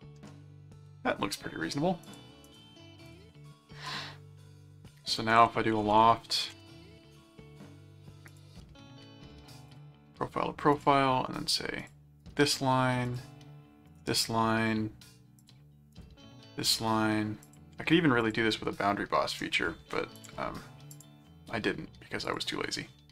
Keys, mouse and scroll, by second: 0.4 middle click, 2.0 click, 3.1 click, 5.1-6.5 typing, 8.3 click, 9.7 click, 10.7 click, 11.8 click, 12.2 right click, 13.1 click, 13.9 right click, 15.4 click, 15.9 right click, 17.4 click, 18.2 click, 20.1 click, 20.9 click, 22.3 click.